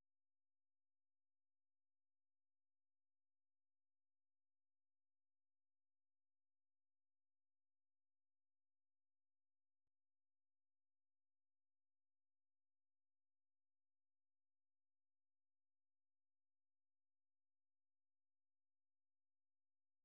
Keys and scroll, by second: 8.4-12.2 typing, 13.4-15.0 typing, 19.4 j, 19.8 j.